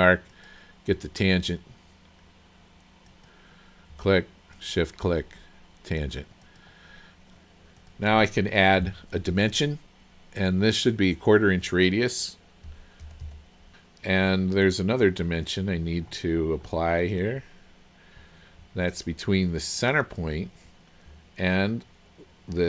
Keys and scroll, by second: 13.1 KP_2, 13.3 KP_5.